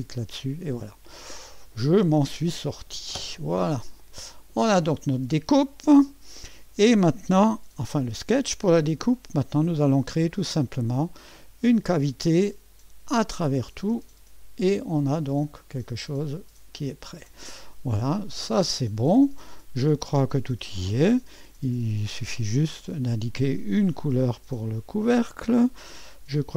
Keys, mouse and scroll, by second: 0.0-0.4 typing, 1.3-1.8 scroll up 1, 4.0 click, 7.6 2, 11.7 click, 13.3 click, 14.0 click, 15.0-17.3 drag, 18.4 click, 23.0 click.